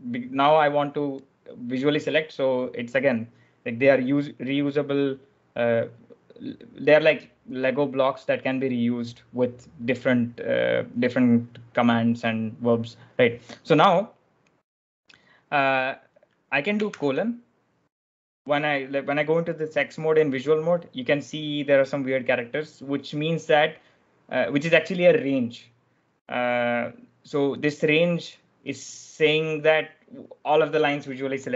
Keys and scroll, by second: 16.9 shift+;.